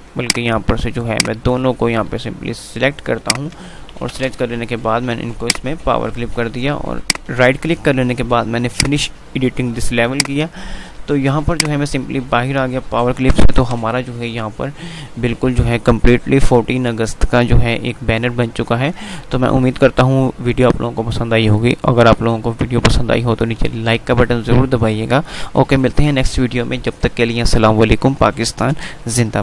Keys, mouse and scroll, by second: 0.0 ctrl+z, 0.5 click, 3.2 shift+click, 3.5 shift+click, 4.1 alt+c, 4.2 alt+w, 5.2 click, 7.1 right click, 8.9 click, 13.4 shift+F2.